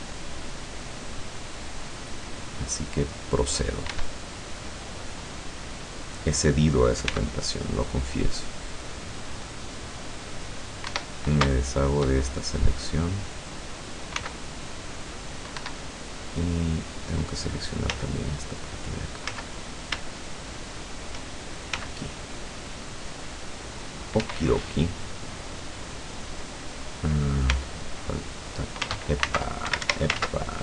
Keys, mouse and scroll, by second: 4.0 Escape, 4.7-6.4 middle drag, 7.2 c, 8.0-11.1 drag, 11.0 Escape, 11.8 shift+right click, 12.6-13.8 middle drag, 14.2 c, 15.0 middle click, 15.6 Escape, 15.9 click, 16.2 middle click, 16.3 click, 16.5 middle click, 18.0 z, 19.3 z, 19.7 scroll up 1, 20.1 shift+scroll down 1, 20.2 shift+middle click, 20.6 shift+middle click, 21.8 c, 22.4-24.3 drag, 24.2 Escape, 24.6-26.0 middle drag, 27.6 c, 28.0 click, 29.8 ctrl+alt+Escape, 30.2 ctrl+alt+z.